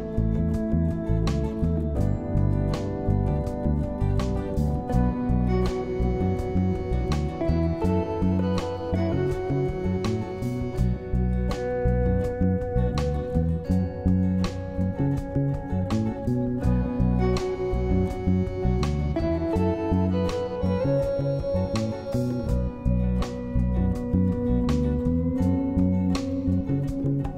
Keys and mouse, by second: 0.9 shift+click, 15.6 click, 24.5 click, 26.7-27.3 middle drag.